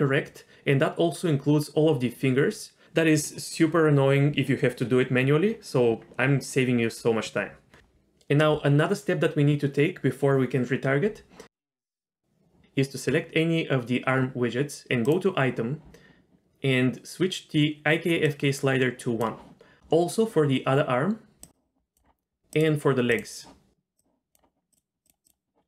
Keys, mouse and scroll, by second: 2.3-2.8 scroll down 2, 11.7 click, 15.0 click, 18.3-19.3 drag, 20.0 click, 21.3 click, 22.5 click, 23.1 click, 24.0 click, 24.7 click, 25.0 click, 25.2 click.